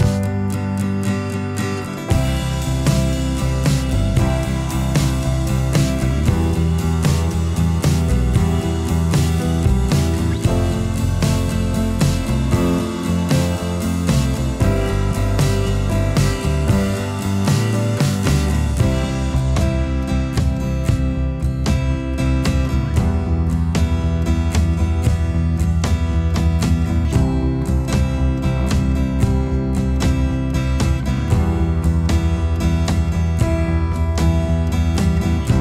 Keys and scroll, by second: 24.5 ctrl++, 25.7 ctrl++, 29.0 [.